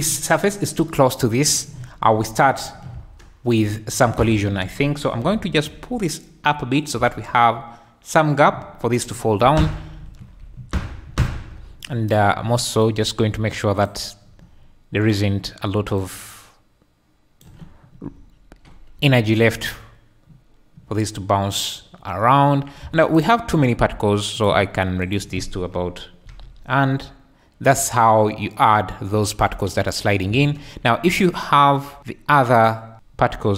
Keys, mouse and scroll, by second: 2.5 shift+click, 2.9 space, 4.1 Escape, 5.2 g, 5.6 z, 6.8 click, 7.0 space, 9.6 Escape, 9.9 z, 10.4 `, 10.9 `, 12.1 click, 16.0-17.4 drag, 18.1 `, 19.0 space, 20.5 middle click, 22.9 space, 23.1 click, 23.2-24.3 middle drag, 24.3 click, 24.4-25.1 middle drag, 25.1-26.2 drag, 26.2 alt+space, 26.2-27.7 alt+middle drag, 26.4 alt+a, 30.3 space, 32.6 click, 32.9 alt+a.